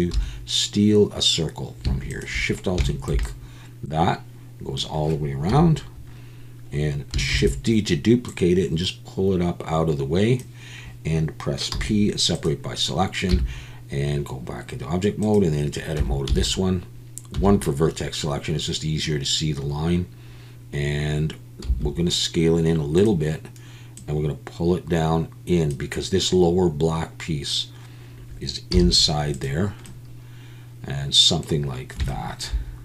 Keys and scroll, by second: 0.1 2, 5.5 KP_1, 7.3 shift+d, 11.7 p, 13.3 Tab, 16.0 Tab, 16.3 a, 17.3 1, 21.6 s, 28.7 z.